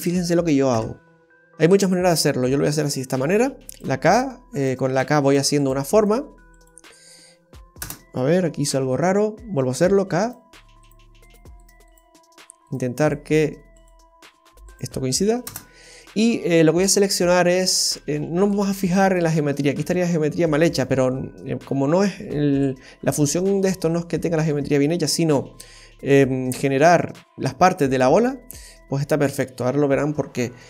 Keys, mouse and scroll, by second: 0.7 Tab, 1.6-2.4 scroll up 5, 2.5 shift+middle click, 8.7 ctrl+z, 16.8 click, 17.2 click, 18.4 right click, 19.0 shift+right click, 19.7 shift+right click, 20.5 shift+right click, 21.1 middle click, 22.5 p, 24.1-24.5 scroll down 1, 24.5 middle click, 27.3 right click.